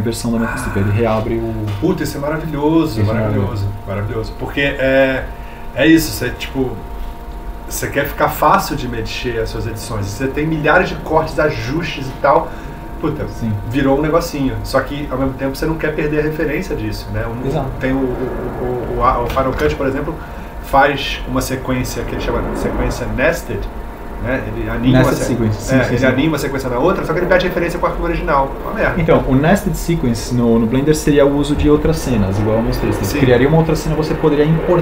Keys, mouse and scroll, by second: 20.2 ctrl+g.